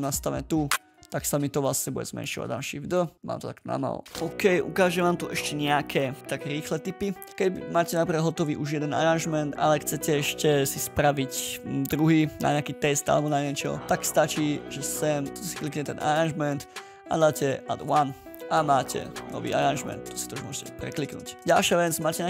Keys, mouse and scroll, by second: 0.9 right click, 1.9 ctrl+a, 2.8 shift+d, 7.3-7.7 ctrl+scroll up 3, 7.7-8.5 ctrl+scroll down 3, 12.0-12.8 ctrl+scroll up 3, 14.3 ctrl+scroll up 2, 20.9 ctrl+scroll down 11, 21.4 ctrl+scroll up 9.